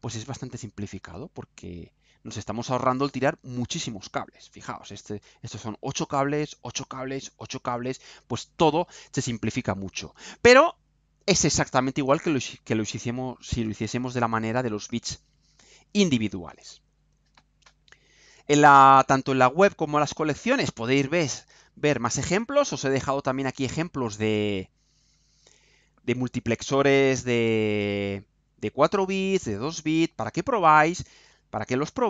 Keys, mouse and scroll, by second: 18.9 click, 20.5 click, 21.1-21.8 scroll down 4, 22.0-22.6 scroll down 2, 22.7-23.2 scroll down 4, 23.8-24.2 scroll down 2, 24.8-25.8 scroll down 4, 25.8-26.2 scroll down 2, 27.2-30.4 scroll down 4, 30.4-30.8 scroll down 1, 31.3 scroll down 2.